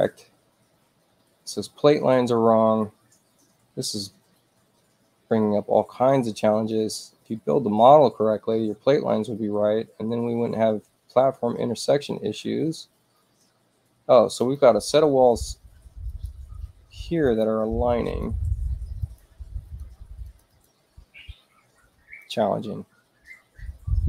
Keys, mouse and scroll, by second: 14.3 click, 16.0 click, 17.2 click, 18.0 click, 18.9 click, 19.6 click, 20.2 click, 20.4 click.